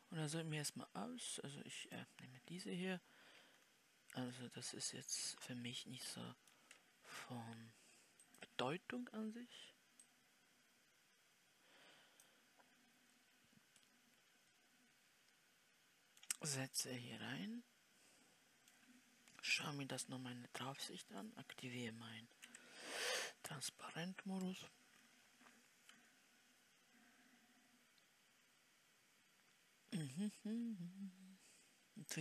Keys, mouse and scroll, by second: 3.9 scroll down 2, 4.1-4.7 scroll up 1, 4.7-16.8 middle drag, 16.8-17.5 scroll down 3, 17.5-19.8 middle drag, 19.8 KP_7, 22.7 w, 25.3 scroll down 3, 26.1 KP_Decimal.